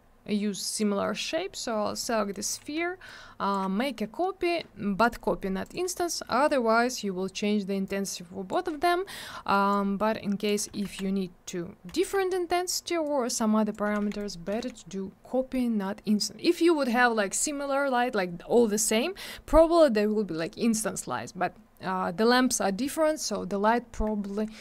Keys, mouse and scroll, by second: 0.7 click, 0.8 click, 1.0 scroll down 1, 2.1 middle click, 3.1 shift+click, 5.0 click, 5.1 click, 5.6 click, 5.7 click, 6.0 scroll down 1, 6.3 middle click, 6.5 middle click, 6.6 scroll down 1, 6.8 middle click, 7.0 double middle click, 7.1-7.6 scroll up 1, 7.9 click, 8.7-9.3 scroll up 1, 9.7 click, 10.8 ctrl+z, 13.1 click, 14.0 alt+w, 14.2 right click, 14.3 right click, 14.5 alt+w.